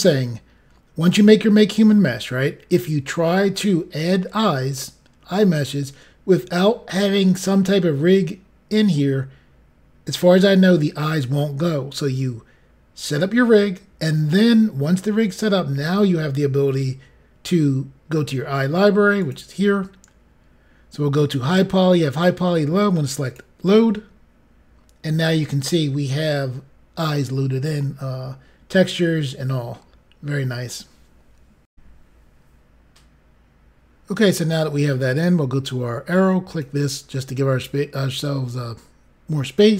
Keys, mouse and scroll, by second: 19.2 click, 20.0-21.2 scroll down 5, 23.2 click, 27.8 middle click, 31.7 Pause, 32.4 Insert, 36.4 click.